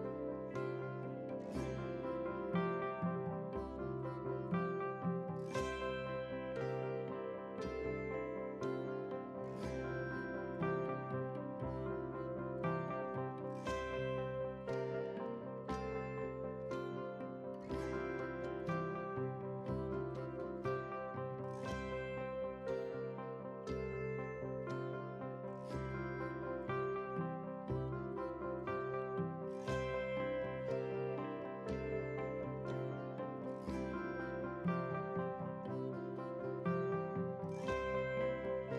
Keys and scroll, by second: 12.7 ctrl+c, 14.3 ctrl+v, 14.9 ctrl+v, 31.2 shift+F11, 32.0 shift+F11.